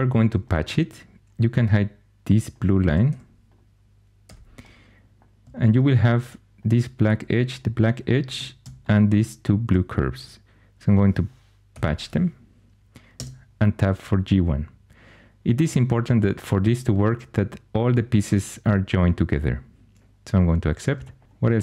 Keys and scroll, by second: 3.0 2, 4.2 h, 11.7 shift+super+p, 13.1 Tab, 21.2 alt+h.